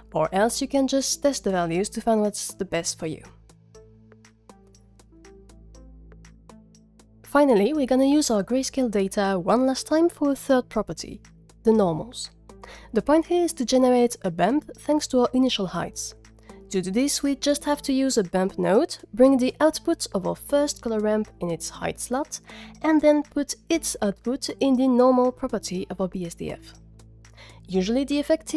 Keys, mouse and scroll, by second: 0.3 drag, 0.9-1.3 drag, 1.5 drag, 2.2 drag, 4.5 click, 4.7 click, 5.1 ctrl+click, 5.2 click, 5.6 click, 5.8 ctrl+click, 8.8 middle click, 10.0-10.8 scroll down 4, 10.7 middle click, 11.6 middle drag, 11.9 click, 12.1-13.2 middle drag, 16.0 shift+a, 21.8 click, 22.0-22.4 drag, 23.0 click, 25.7 click.